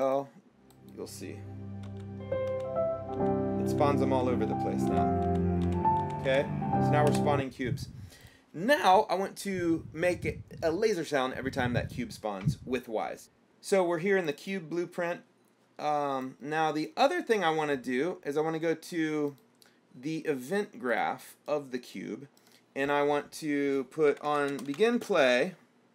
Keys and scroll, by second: 2.1-6.5 typing, 7.3 Escape, 24.1-25.9 typing.